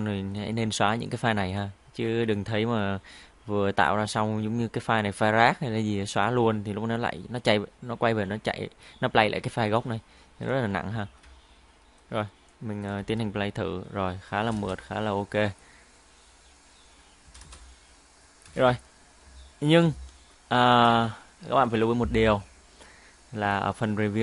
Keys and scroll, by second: 13.1 space, 14.4 space, 14.6 space, 17.3 space, 17.4 space.